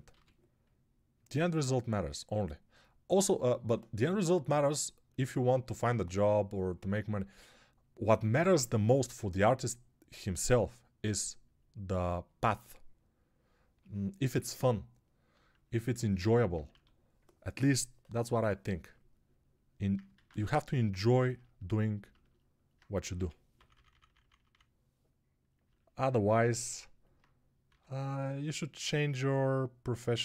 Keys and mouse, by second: 0.0 g, 16.5 1, 17.5-18.2 [, 20.1 alt+q, 23.0-24.3 typing, 27.5 x, 30.0-30.2 typing.